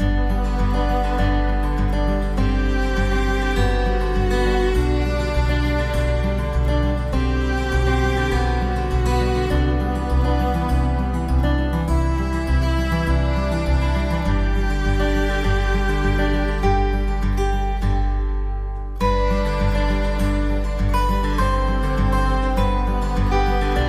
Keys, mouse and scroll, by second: 1.2 click, 3.8 click, 6.3 click, 9.7 click, 12.1 middle click, 12.9 shift+middle click, 13.4 middle click, 14.2 ctrl+s, 14.6 middle click, 17.8 click, 19.5 middle click.